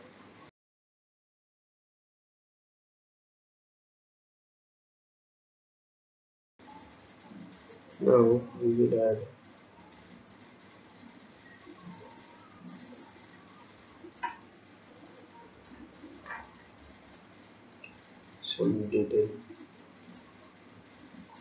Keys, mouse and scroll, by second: 8.1 click, 16.6 click, 18.7 click.